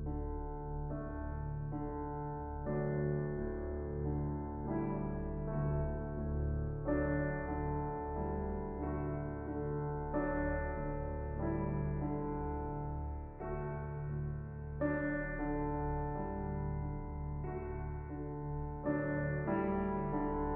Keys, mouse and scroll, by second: 1.5-2.2 middle drag, 2.2-3.5 scroll down 7, 3.5-4.7 drag, 4.7-5.2 scroll down 13, 5.2-5.8 middle drag, 5.8-6.7 drag, 6.9-7.2 scroll down 3, 7.2 s, 7.6 s, 8.0-8.5 middle drag, 8.5 click, 9.1-9.6 shift+middle drag, 9.6 click, 10.0 s, 10.4-11.1 middle drag, 11.1 KP_0, 11.7 click, 12.8 g, 13.6 g, 16.1 click, 17.0 click, 18.1 r, 19.4-20.5 drag.